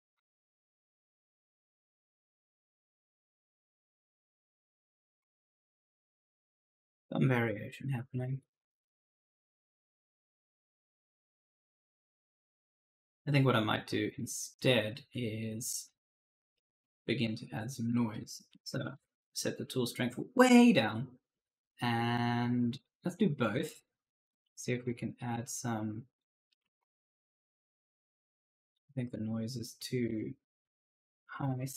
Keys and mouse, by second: 0.0-0.5 typing, 0.5 click, 2.4-9.1 typing, 2.6 right click, 5.2 right click, 10.2 right click, 10.8 e, 11.2 right click, 12.8 click, 13.9 click, 14.7-16.4 typing, 14.7 right click, 17.3 click, 18.2-19.2 typing, 20.7 click, 22.6 click, 26.3-27.9 typing, 26.4 right click, 28.1 ctrl+z, 30.0 click, 31.3-31.7 typing.